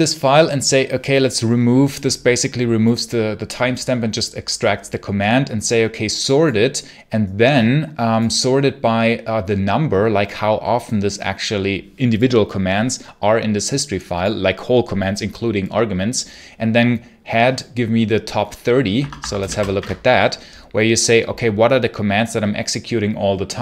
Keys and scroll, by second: 18.8 Escape, 19.0-19.8 typing.